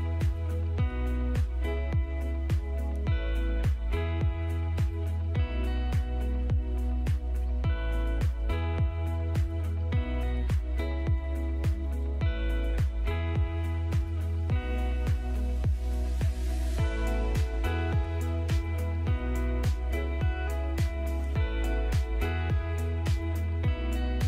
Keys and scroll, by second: 2.1 ctrl+shift+a, 4.2 F3, 4.7 Escape, 5.4 F4, 7.6 c, 7.8 Escape, 8.8 shift+F2, 13.4 b, 13.8 Escape, 15.8 shift+Page_Up, 16.5 shift+Page_Down, 22.3 F3, 22.6 Escape.